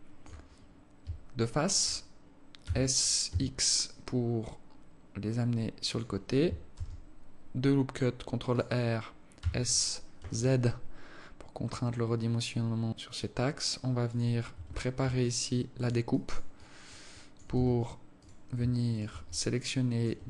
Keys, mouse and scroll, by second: 0.0 alt+shift+click, 0.8-1.1 scroll up 3, 1.7 alt+shift+click, 2.9 s, 7.0 ctrl+r, 9.8 s, 15.0 Tab, 15.6 alt+click, 16.5 alt+click, 17.0 alt+click, 17.5 alt+click, 18.0 Tab, 18.6 right click, 19.3 shift+right click, 20.0 alt+click.